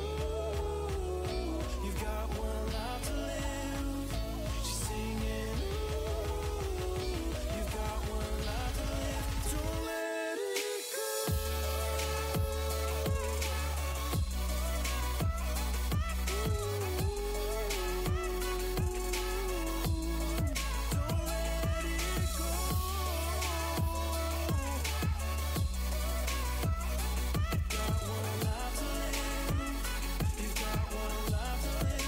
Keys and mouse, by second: 1.5 v, 4.2-6.3 right drag, 6.3 w, 10.5 g, 13.1-16.9 drag, 16.9 w, 19.0-22.0 drag, 19.8 g, 23.4-25.8 drag, 24.9 v, 29.3 z, 30.9-32.0 drag, 30.9 c.